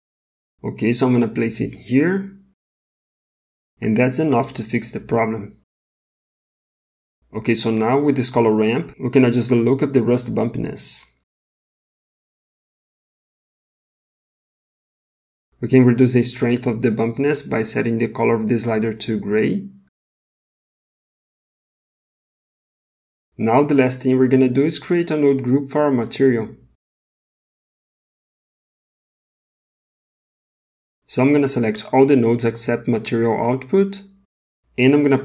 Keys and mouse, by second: 8.2 middle click, 9.3 middle click, 10.5-11.8 drag, 12.7-13.6 drag, 14.3 click, 25.7 middle click, 27.0 middle click, 27.8 ctrl+z, 27.9 click, 28.6-29.1 drag, 29.1 g, 30.4 middle click, 31.8-32.9 drag.